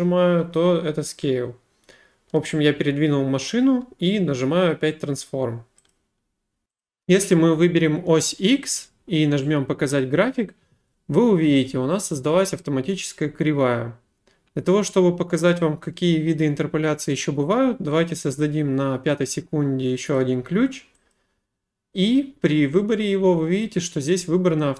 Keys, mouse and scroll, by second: 5.9 click, 6.3 click, 6.8 click, 8.6 click, 10.0 click, 20.2 click, 21.1 click.